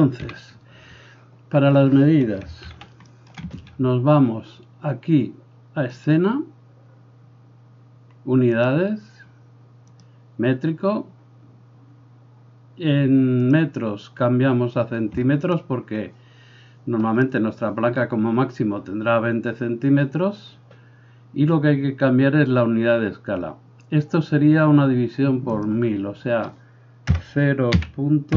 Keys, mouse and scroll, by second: 0.3 n, 2.7 shift+c, 3.2-6.0 shift+middle drag, 6.0-28.3 drag.